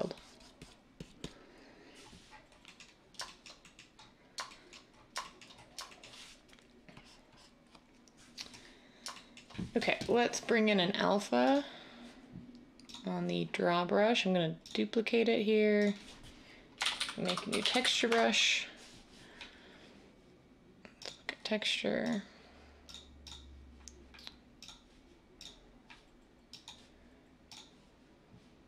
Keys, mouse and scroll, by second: 16.8-17.8 typing, 18.0 Return.